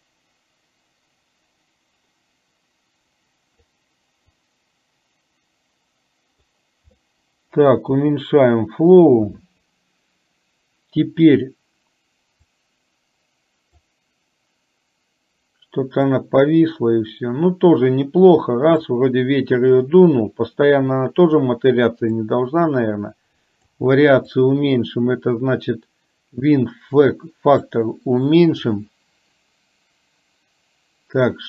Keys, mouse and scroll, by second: 4.4-6.7 drag, 7.2 middle click, 12.6-13.8 drag, 16.3-19.1 drag, 22.3-23.8 drag, 24.4-27.9 drag.